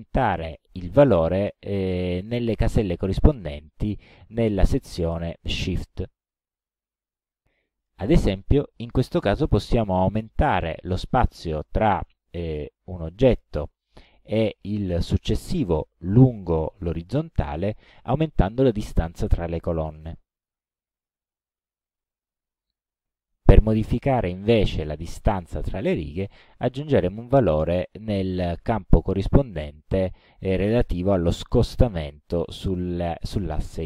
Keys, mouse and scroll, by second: 7.1 click, 11.6 KP_5, 20.4 click, 27.2-28.7 drag.